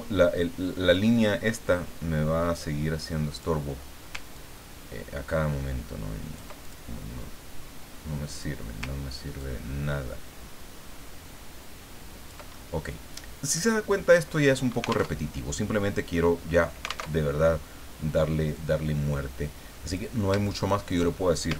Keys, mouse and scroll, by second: 2.6 click, 4.3-6.9 ctrl+drag, 8.3 click, 9.4-12.5 ctrl+drag, 12.8 middle click, 13.8 middle click, 15.1 alt+Tab, 17.1 alt+Tab, 18.5-20.2 drag, 20.6 shift+click.